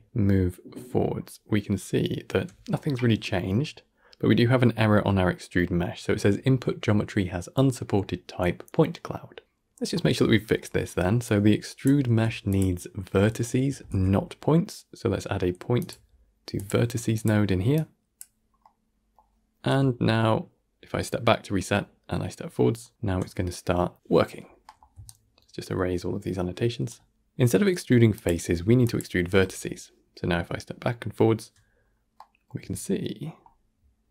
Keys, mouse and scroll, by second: 3.4 scroll up 1, 9.4-9.8 scroll down 1, 9.8 middle click, 10.5-11.1 scroll down 1, 11.1 click, 12.7-13.1 scroll up 1, 13.1 middle click, 13.7 shift+a, 18.3 scroll down 2, 18.5 middle click, 19.2-19.9 scroll up 1, 19.9 alt+scroll down 1, 24.5 middle click, 24.8 d, 24.9-26.8 right drag, 26.8 d, 27.3 scroll up 3, 28.0-29.5 drag, 29.5-30.1 alt+scroll down 1, 30.5-30.9 alt+scroll down 2, 31.6-32.0 scroll down 1, 32.0-32.6 middle drag, 32.6 alt+scroll down 1, 33.1-33.4 alt+scroll up 7, 33.7-34.1 alt+scroll down 5.